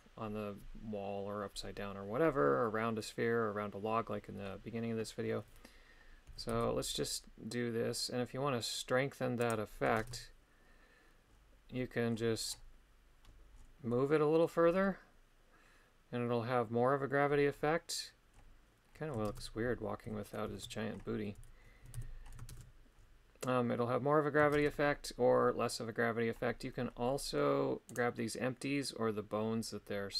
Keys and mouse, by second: 6.3 g, 6.5 z, 9.4 click, 10.0 shift+space, 13.9 middle click, 19.3 shift+space, 20.5 alt+h, 21.8 a, 22.0 a, 22.5 shift+space, 24.6 shift+space, 27.9 right click.